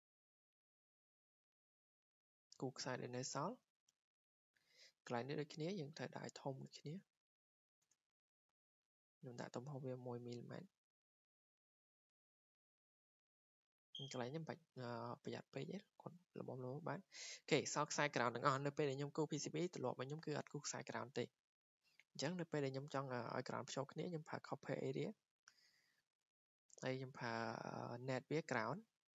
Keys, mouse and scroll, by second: 0.9 click, 1.5 scroll, 2.2 click, 2.9 click, 3.5-3.9 scroll, 4.2 scroll, 5.7 scroll down 4, 6.2-8.2 drag, 6.9 1, 7.9 Return, 9.4 click, 9.8 1, 11.3 click, 11.9 Return, 12.8 click, 15.3-15.7 scroll, 16.1-16.6 scroll down 6, 17.1 Escape, 17.5 scroll, 20.7-21.0 scroll, 21.4 scroll, 23.0 scroll down 1, 25.6 middle click, 25.6 click, 27.2 click, 28.1 click, 28.9 click.